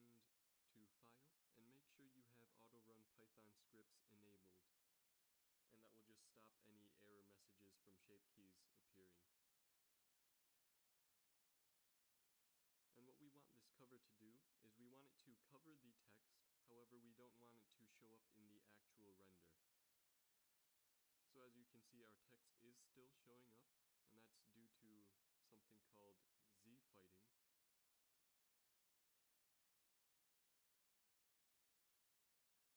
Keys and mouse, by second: 10.2 z, 13.3 middle drag, 20.8-21.1 middle drag, 21.3 middle click, 22.1 shift+z, 24.6-25.4 middle drag, 26.2 z, 26.5 z, 27.3 shift+z, 32.3-32.7 middle drag.